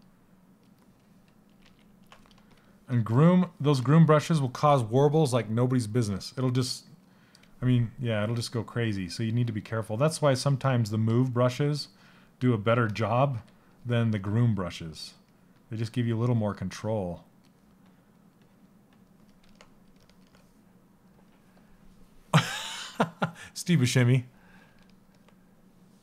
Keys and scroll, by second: 1.2 ctrl+z, 12.9 s.